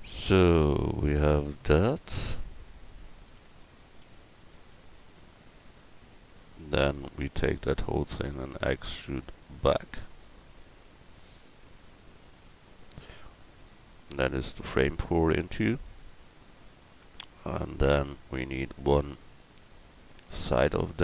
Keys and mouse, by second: 0.8 Tab, 1.8 middle click, 2.5 Tab, 3.1 right click, 4.0 x, 6.6 right click, 8.2 e, 14.2 Tab, 14.2-16.1 drag, 16.3-19.5 drag, 17.4 Tab, 20.5 click.